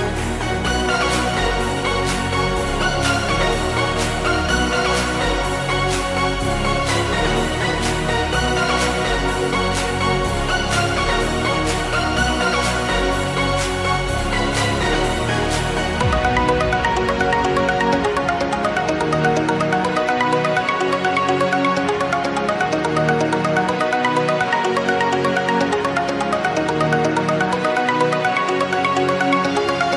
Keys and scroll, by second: 1.8 x, 2.6 ctrl+z, 2.7 x, 6.5 space, 7.0 space, 7.5 ctrl+space, 11.8 Delete, 12.2 ctrl+shift+n, 12.5 Return, 12.8 space, 14.4 z, 18.2 Delete, 19.3 ctrl+shift+n, 19.4 Return, 19.8 space, 21.7 ctrl+z, 22.0 space, 22.8 space, 23.1 z, 25.8-28.0 typing, 29.3-29.9 typing.